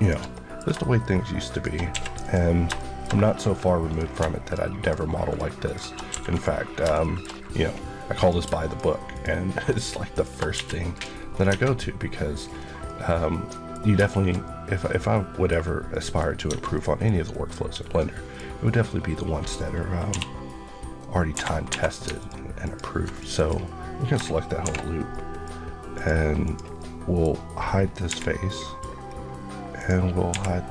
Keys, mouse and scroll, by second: 0.2 shift+middle click, 1.4 shift+click, 1.8 q, 2.1 click, 2.6 shift+middle click, 2.9 shift+scroll up 1, 3.7 click, 4.7 click, 4.7 shift+Left, 5.5 click, 6.2 click, 6.6-6.9 scroll down 2, 6.9 shift+middle click, 7.1 scroll up 1, 7.7 scroll up 1, 7.9 scroll, 8.1 click, 10.1 click, 10.3 click, 10.4 q, 10.8 click, 11.2 scroll, 11.2 scroll down 1, 11.4 Tab, 11.6 middle click, 12.2 scroll down 1, 12.7 middle click, 13.7-14.3 scroll down 4, 14.0 shift+middle click, 14.3 middle click, 16.1 scroll up 1, 16.4 Tab, 16.6 middle click, 17.1 scroll down 1, 17.9 middle click, 20.0 k, 21.2 Escape, 21.6 3, 22.1 alt+click, 23.0 click, 23.2 click, 24.5 shift+h, 25.0 middle click, 25.8 click, 25.8 click, 26.6 middle click, 27.7 scroll down 1, 28.0 h, 28.4 middle click, 29.0-29.6 scroll down 1, 29.6 click, 30.2 h.